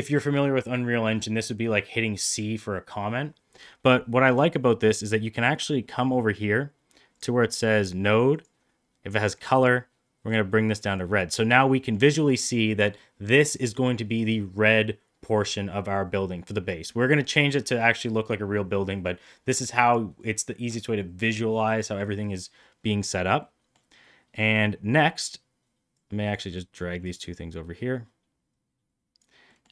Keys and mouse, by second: 4.2 click, 8.3 click, 11.7 middle click, 23.4 middle click, 25.8-26.3 drag, 26.9-29.1 drag, 29.5 middle click.